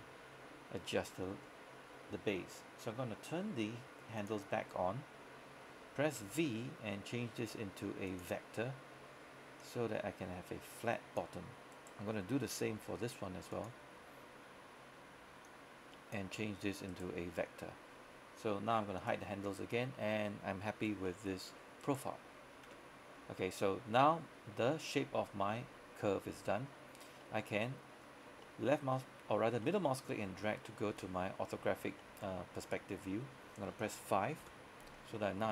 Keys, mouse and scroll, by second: 3.3-4.2 scroll down 1, 4.2 click, 6.3 v, 8.2 click, 11.8 right click, 12.8 v, 13.6 click, 17.0 right click, 17.4-19.1 scroll down 1, 19.1 click, 19.8-20.4 scroll down 1, 20.4 scroll up 1, 21.1 shift+middle click, 21.9 right click, 22.7 Tab, 23.2 scroll down 1, 25.0-26.7 scroll up 1, 26.7-27.3 scroll down 1, 27.3 middle click, 28.3 scroll down 1, 28.5 middle click, 29.3-29.7 scroll up 1, 29.7 middle click, 30.4 scroll down 1, 30.7 middle click, 33.0-33.8 scroll up 1, 34.5 KP_5, 35.1 scroll down 1, 35.2 middle click.